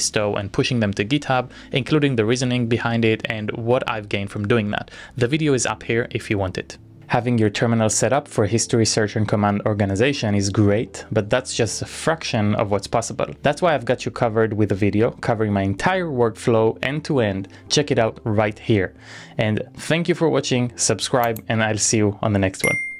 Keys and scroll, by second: 6.6 shift+z.